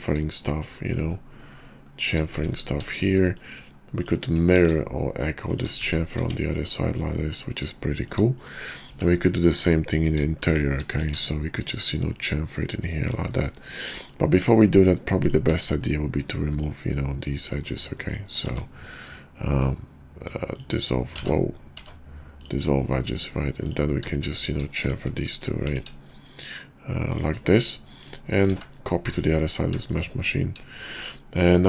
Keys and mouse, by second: 2.9 shift+click, 3.3 click, 3.8 click, 4.5 ctrl+b, 5.8 `, 6.2 Tab, 7.9 shift+click, 8.4 click, 8.9 Tab, 9.4 click, 9.9 click, 10.4 shift+click, 10.9 ctrl+b, 13.9 middle click, 17.9 shift+click, 20.5 x, 21.2 ctrl+z, 21.7 x, 22.7 click, 24.3 click, 25.2 click, 25.7 ctrl+b, 27.5 click, 28.0 click, 28.5 alt+x, 29.0 `, 29.8 shift+click, 30.8 shift+click, 31.4 click.